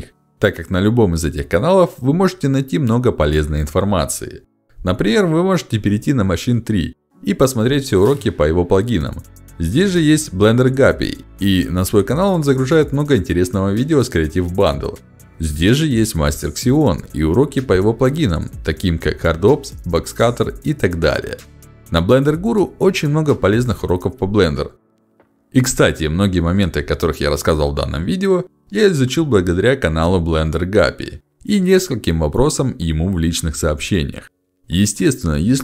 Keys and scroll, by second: 3.9 ctrl+alt+d, 9.3 ctrl+alt+d, 16.6 ctrl+alt+d, 22.5 ctrl+alt+d.